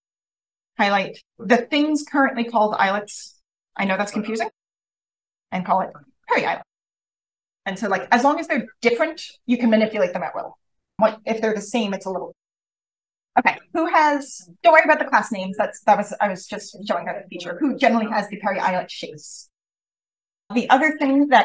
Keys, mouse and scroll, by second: 0.0-0.4 scroll down 1, 0.4-3.0 scroll up 1, 1.4 click, 2.1 click, 2.7 click, 3.6 click, 3.8 right click, 4.8 click, 5.3 click, 5.9 click, 7.0 click.